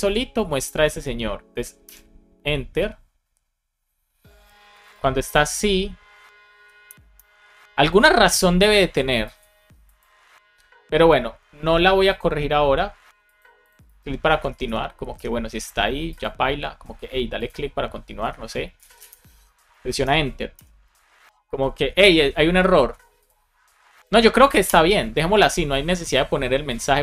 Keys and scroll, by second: 1.8 Return, 6.7 Return, 14.2 BackSpace, 14.8 BackSpace, 18.1 BackSpace, 19.7 shift+super+Left, 19.9 BackSpace, 20.5 Return, 24.5 Return.